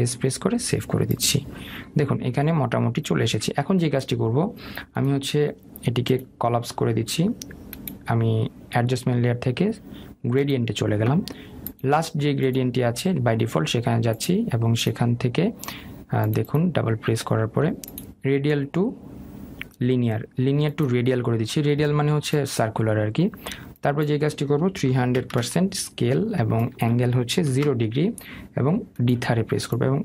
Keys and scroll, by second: 0.5 ctrl+s.